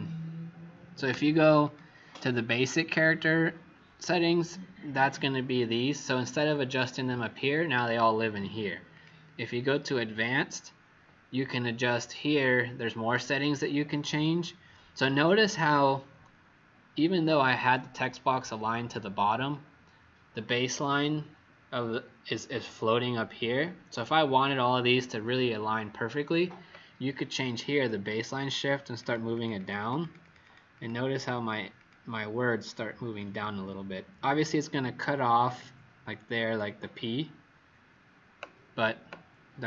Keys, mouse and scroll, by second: 1.5 click, 28.9 click, 29.3 click, 29.5 click, 29.7 click, 30.2 click, 30.4 click, 30.7 click, 31.0 click, 31.7 click, 33.1 click.